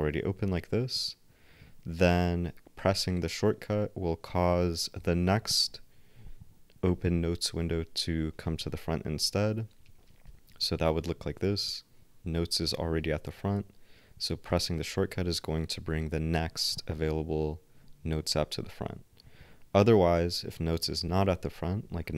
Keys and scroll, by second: 10.2 ctrl+alt+n, 14.5 ctrl+alt+n.